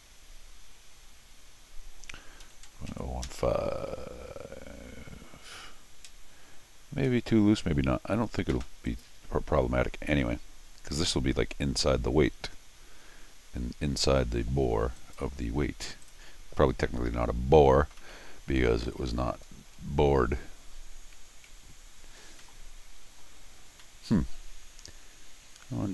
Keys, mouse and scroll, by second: 8.9 click, 15.0 click, 16.0 click, 16.4 scroll down 2, 16.6 middle click, 17.6 scroll down 2, 18.0 middle click, 18.4-19.5 scroll down 2, 19.5-19.9 scroll down 1, 19.9 scroll up 2, 22.4 middle click, 23.8 middle click.